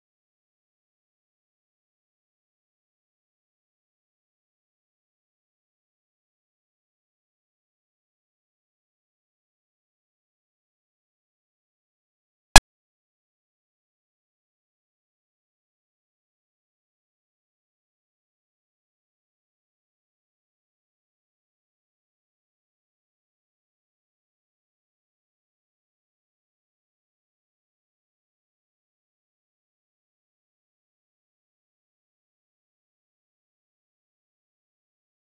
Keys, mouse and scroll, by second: 1.1 click, 1.6 0, 2.8 middle drag, 3.0 scroll down 2, 4.7-6.1 shift+middle drag, 6.1 ctrl+j, 6.4 click, 7.9 middle click, 8.1-8.5 scroll down 6, 8.5-9.5 middle drag, 9.5 ctrl+j, 9.6 scroll up 4, 9.9-10.8 middle drag, 10.8-11.2 scroll up 2, 11.2-11.7 shift+middle drag, 11.7 click, 12.3 shift+l, 13.8 ctrl+j, 14.4-15.4 shift+drag, 15.4-15.8 middle drag, 15.8 shift+click, 16.7 ctrl+j, 16.9 scroll down 1, 17.4 KP_Divide, 17.7 scroll up 4, 17.9 middle drag, 18.2 Tab, 18.4-19.6 middle drag, 19.6 Tab, 19.8 shift+middle click, 20.2 KP_Divide, 20.6 middle drag, 20.8-21.2 scroll down 10, 21.2-21.6 shift+scroll up 3, 21.2 shift+middle drag, 21.6-22.0 shift+middle drag, 22.0 click, 22.3-22.8 middle drag, 22.8 click, 23.4 shift+l, 24.3-25.3 middle drag, 25.3 shift+click, 26.2 ctrl+j, 26.4 KP_Divide, 26.8-27.2 middle drag, 27.2-27.8 scroll up 10, 27.5 Tab, 27.8 shift+middle click, 28.0 scroll down 1, 28.9 u, 31.0-31.3 scroll up 4, 31.9-33.4 drag, 33.4-33.9 scroll down 8, 34.2 a, 34.9 r.